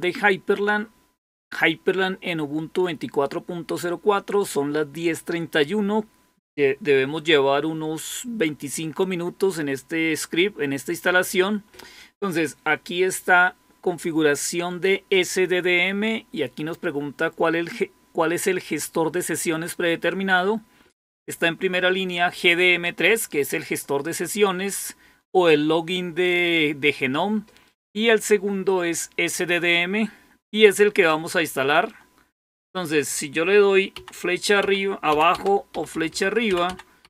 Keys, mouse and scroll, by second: 33.9 Down, 34.5 Down, 35.0 Down, 35.6-37.0 typing.